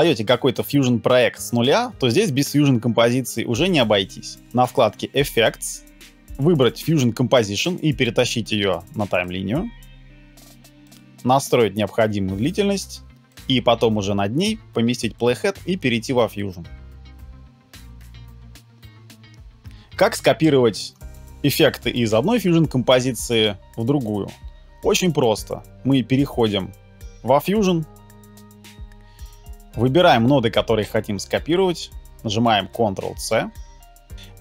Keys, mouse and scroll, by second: 19.0 BackSpace, 33.3 ctrl+c.